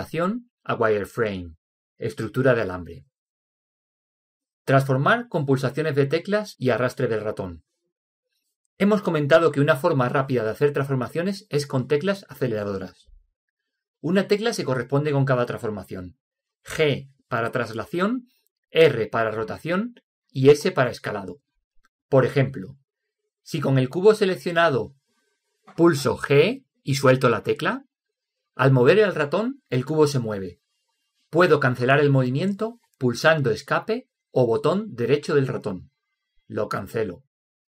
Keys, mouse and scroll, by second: 1.7-3.4 drag, 26.9 g, 27.4 g, 33.1 Escape.